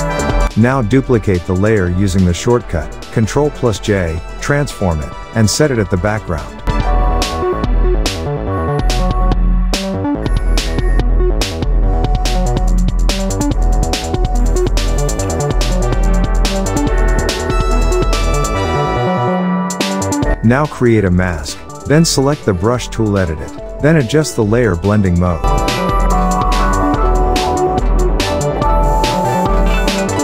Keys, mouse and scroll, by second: 2.2 ctrl+j, 3.4 click, 4.7 ctrl+t, 5.8-7.3 alt+drag, 7.5-8.4 alt+scroll down 2, 8.4-9.3 drag, 10.6-11.8 drag, 14.1 click, 14.8-16.7 typing, 17.2 click, 17.9-19.0 typing, 19.6 click, 19.7 click, 22.7 alt+scroll down 1, 23.3 alt+scroll up 1, 23.6 space, 23.6-24.1 click, 24.0 space, 24.2 alt+scroll up 2, 25.2-26.4 drag, 27.7-28.4 alt+right click, 28.8-30.2 drag.